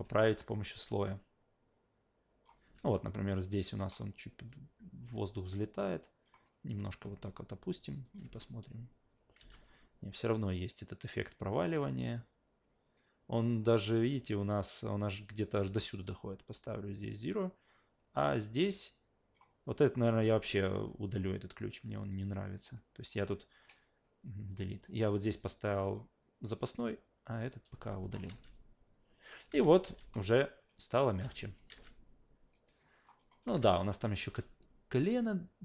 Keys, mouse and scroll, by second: 0.5 s, 1.1 click, 2.8 w, 4.5 click, 8.0 click, 8.2 alt+v, 9.4 alt+v, 9.7-15.4 drag, 15.6 s, 16.6 click, 22.0 right click, 23.0 click, 24.5 click, 25.4 click, 26.6-28.1 drag, 29.5 alt+v, 29.6 click, 29.8 alt+v, 31.2 alt+v, 31.5 click, 32.5 alt+right click, 32.8 alt+middle drag, 33.2 alt+click, 33.5 alt+v, 34.0 click, 34.2 alt+v.